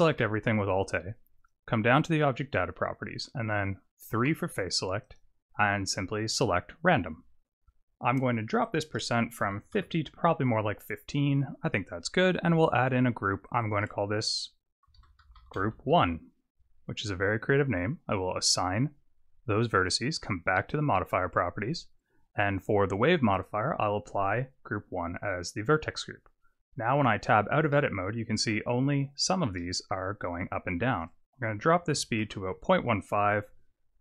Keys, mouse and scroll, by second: 0.1 alt+a, 1.4 click, 4.1 3, 5.0 click, 8.6 click, 12.6 click, 13.5 click, 13.6 click, 18.3 click, 20.1 click, 23.3 click, 27.0 Tab, 27.7 middle click, 28.8-29.2 scroll up 2, 29.6 middle click, 30.9 click.